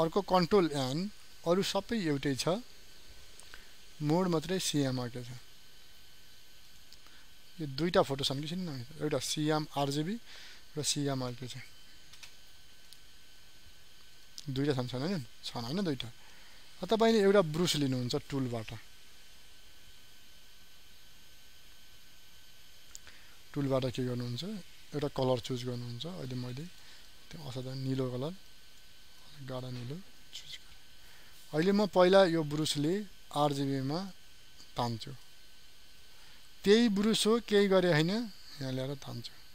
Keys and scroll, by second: 1.0 n.